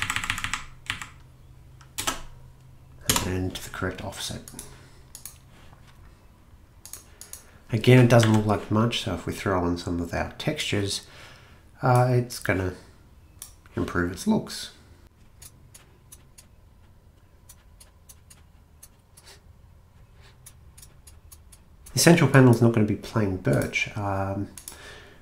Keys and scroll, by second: 0.0 Left, 0.2 Left, 0.3 Left, 0.4 Left, 0.9 Left, 2.0-5.3 typing, 8.2 a.